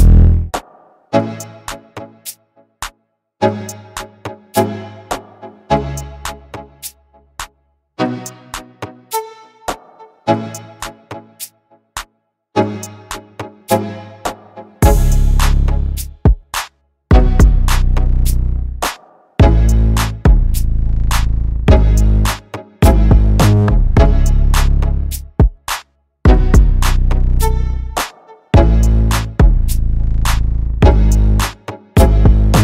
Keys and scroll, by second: 13.8 5, 14.0 0.